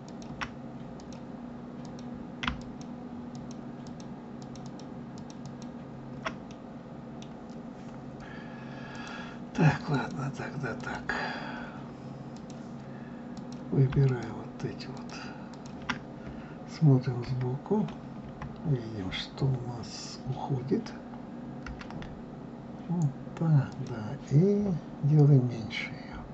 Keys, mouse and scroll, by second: 0.0 shift+click, 0.9 click, 1.8 click, 2.5 shift+click, 3.3 shift+click, 3.8 shift+click, 4.3 shift+click, 4.6 shift+click, 5.1 shift+click, 5.4 shift+click, 6.5-8.9 middle drag, 8.9 click, 9.9 click, 10.8 click, 12.3-13.4 drag, 14.0 shift+click, 14.9 shift+click, 15.5 shift+click, 17.2 KP_1, 18.1 KP_3, 21.6 g.